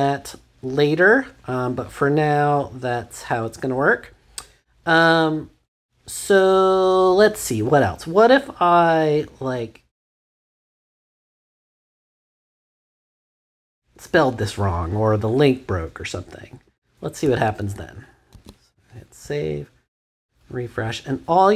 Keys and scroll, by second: 16.6 BackSpace, 17.7 super+BackSpace, 18.3 super+s.